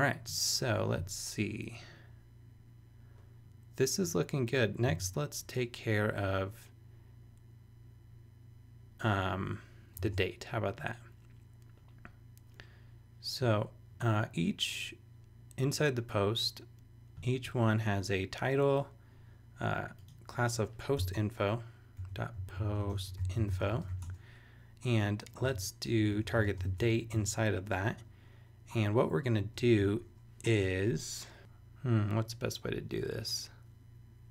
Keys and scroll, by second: 5.0 super+Tab, 10.1 super+Tab, 21.0 Return, 21.7-24.4 typing, 25.0 Return, 25.4-27.1 typing, 27.7 Return.